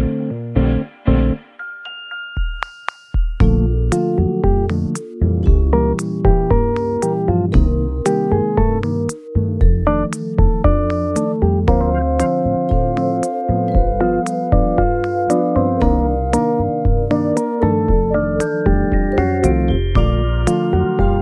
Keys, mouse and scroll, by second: 0.3 g, 0.4 z, 3.7 g, 4.7 x, 4.8 g, 9.4 KP_3, 9.9 KP_0, 9.9 KP_0.